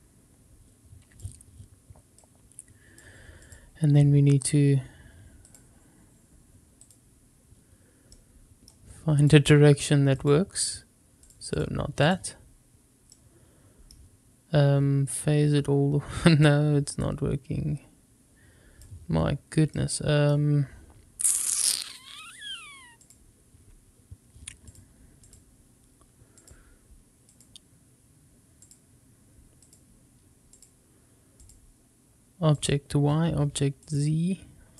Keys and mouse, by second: 2.1 click, 3.4-4.5 drag, 5.4-6.9 drag, 8.1 middle click, 9.2-10.3 drag, 11.2 click, 11.6 click, 13.1 middle click, 15.0-16.4 drag, 17.1-18.8 drag, 19.7 middle click, 23.0 click, 24.6-25.3 drag, 26.4-27.4 drag, 28.7-29.7 drag, 30.5-31.4 drag, 32.6-34.0 drag.